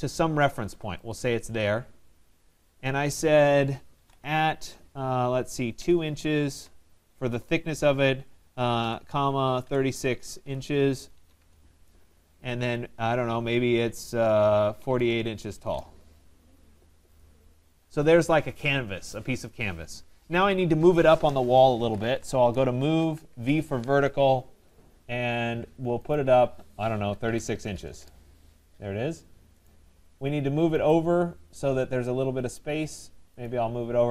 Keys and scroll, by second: 11.4 Return, 22.3 Return, 27.9 Return.